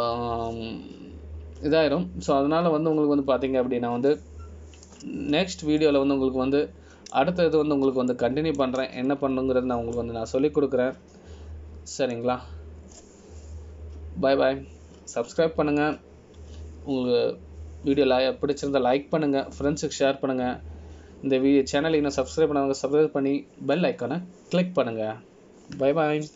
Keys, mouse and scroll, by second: 8.0 middle click, 10.3 shift+middle click, 11.2-11.6 scroll up 2, 12.1 middle click.